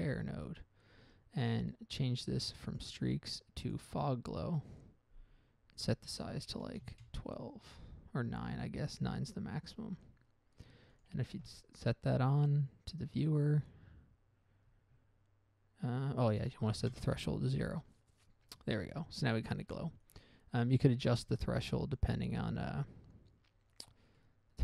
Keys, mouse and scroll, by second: 0.2 click, 0.8 click, 1.3 scroll up 1, 1.7 middle click, 2.6 middle click, 3.0 click, 4.0 click, 6.1 click, 7.0 typing, 7.2 Return, 9.2 click, 10.2-10.7 scroll down 1, 11.3 ctrl+shift+click, 15.0 scroll up 1, 15.2-15.7 scroll down 1, 16.7 click, 17.2 0, 17.3 Return, 20.4 click, 22.2 click, 24.5 middle click.